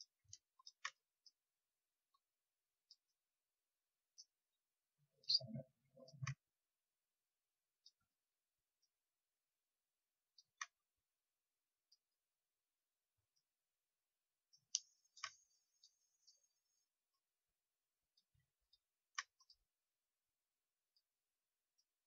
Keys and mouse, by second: 4.0-5.1 middle drag, 5.1-8.7 drag, 8.7-10.2 middle drag, 10.2-13.1 drag, 15.7-22.0 drag.